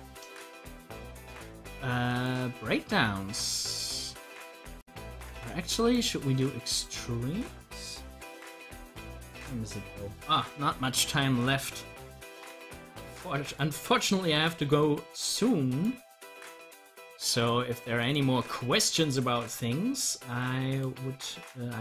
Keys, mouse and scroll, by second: 1.0 click, 11.9-21.2 drag, 21.2 scroll down 1.